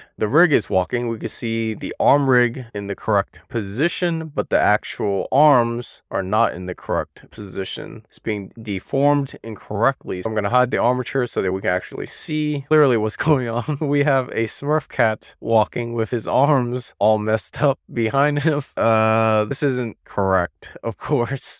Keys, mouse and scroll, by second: 0.2-3.5 middle drag, 4.2-4.7 scroll up 2, 4.7-5.5 scroll down 1, 5.5-7.8 middle drag, 8.0-8.6 scroll down 2, 8.6-9.4 scroll up 1, 10.4 click, 11.5-21.5 middle drag.